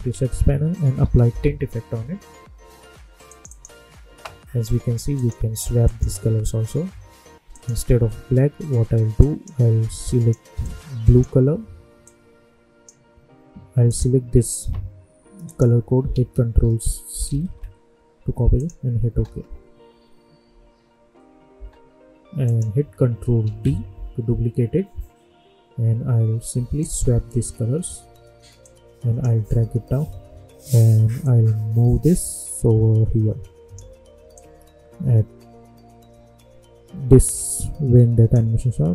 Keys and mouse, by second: 0.0 ctrl+a, 0.5-1.7 typing, 3.2-13.8 drag, 16.1 ctrl+a, 17.2 ctrl+c, 18.5 click, 19.0 space, 21.5 space, 22.4 click, 23.4 ctrl+d, 26.7-31.2 drag, 31.2-38.9 drag.